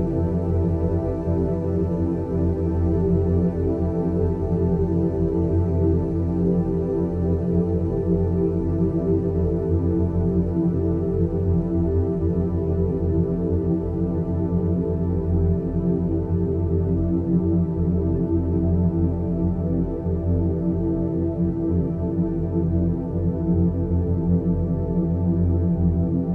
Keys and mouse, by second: 3.0 Tab, 5.6 middle click, 6.5 click, 7.4 click, 9.4 click, 10.0 g, 14.2 click, 14.4 g, 16.6 click, 16.7 g, 18.5 click, 20.0-20.8 middle drag, 21.3-22.2 drag, 22.9 g, 25.1 click, 25.5 g.